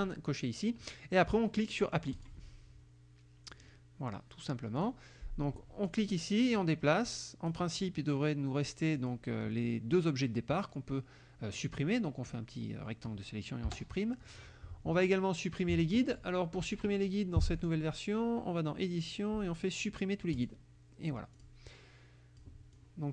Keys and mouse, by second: 2.2 click, 3.6 click, 4.8 click, 5.9 click, 6.6 click, 9.0 click, 10.6-12.5 drag, 13.7 Delete, 17.6 click, 20.4 click, 21.3 click, 22.8 click.